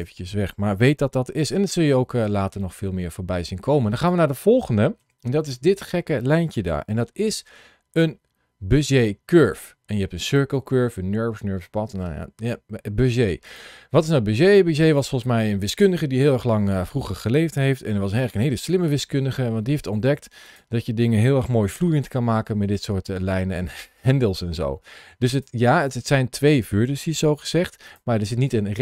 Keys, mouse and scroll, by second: 1.9 scroll down 2, 2.4 shift+middle click, 3.8 click, 4.9 KP_Decimal, 6.9 shift+a, 13.3 click, 14.7 click, 16.2 middle click, 18.7 Tab, 19.4 scroll down 1, 20.3 click, 21.7 g, 25.2 click, 25.7 click, 27.0 g, 27.7 click.